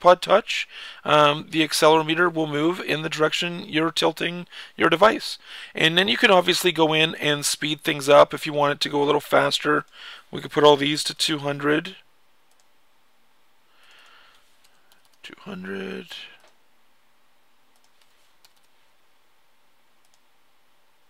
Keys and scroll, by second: 0.0-0.4 typing, 0.2 Left, 2.8 typing, 10.1-11.4 typing, 14.2-15.3 typing, 17.6-18.8 typing.